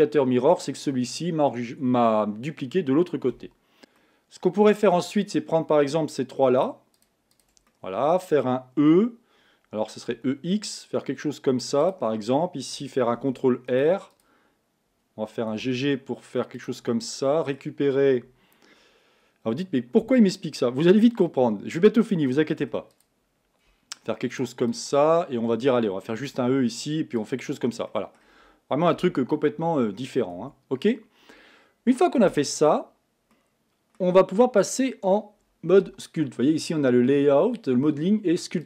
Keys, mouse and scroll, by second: 3.3 KP_1, 3.8 a, 4.0-6.6 middle drag, 6.6 shift+click, 6.9 shift+click, 7.3 shift+click, 7.7-8.9 middle drag, 8.9 e, 13.2 ctrl+r, 15.6 g, 16.9-19.9 middle drag, 22.7 3, 22.9 click, 24.3 shift+click, 24.7 shift+click, 25.2-26.2 middle drag, 26.2 e, 27.6-27.9 scroll down 1, 27.9 middle click, 28.2 scroll up 1, 29.0 KP_1, 29.8-30.4 scroll up 2, 30.4 Tab, 33.3 middle click, 34.2-34.6 scroll down 2, 34.6-37.7 middle drag.